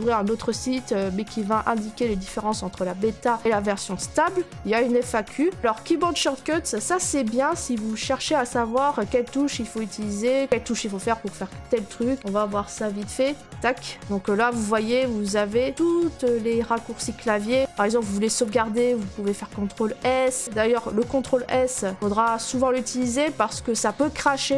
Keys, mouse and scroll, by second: 12.2 click, 13.4 click, 14.1 middle click, 14.2 middle click, 14.2 scroll, 21.8 click, 22.0 click, 22.0 click.